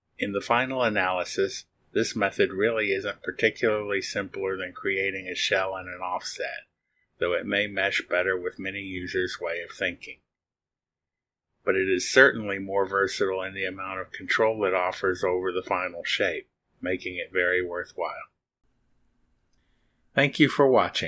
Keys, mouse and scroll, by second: 0.0-3.0 drag.